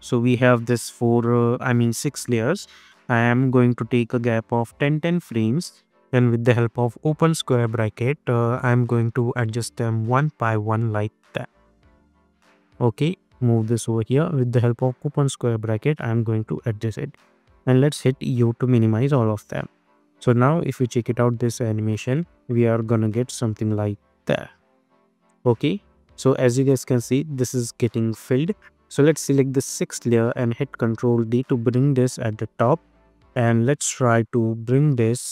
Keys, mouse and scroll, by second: 0.1-2.0 scroll up 1, 2.7 =, 3.1 =, 4.5 click, 7.5-9.3 drag, 9.6 [, 10.5 click, 11.6 [, 12.1 click, 13.3 [, 14.0 click, 15.3 [, 16.2 click, 17.4 u, 18.0 u, 19.3 click, 19.8 space, 25.1 space, 29.6 click, 31.1 ctrl+d, 31.9-35.3 drag.